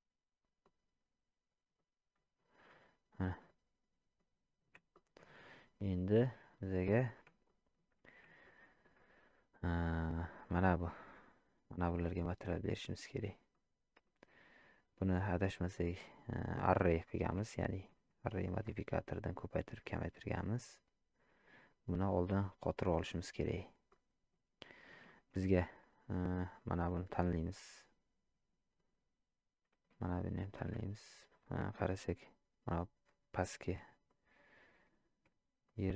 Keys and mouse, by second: 0.6-1.7 drag, 3.2-4.2 middle drag, 4.9 shift+middle drag, 7.5 shift+middle drag, 8.4-8.8 shift+middle drag, 10.4 click, 13.5-14.0 middle drag, 17.6-17.9 shift+middle drag, 18.4 shift+middle drag, 19.9-23.0 drag, 23.9-24.3 middle drag, 25.0 shift+drag, 26.9-28.5 drag, 30.4 shift+click, 34.1-34.8 ctrl+drag, 35.6-35.9 drag.